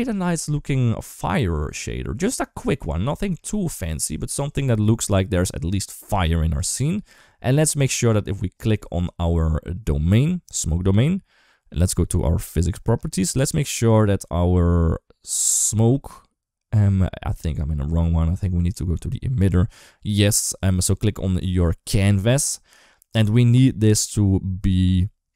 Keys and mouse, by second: 1.6 click, 2.3-2.6 middle drag, 3.6 shift+middle drag, 5.3-6.4 drag, 12.1 click.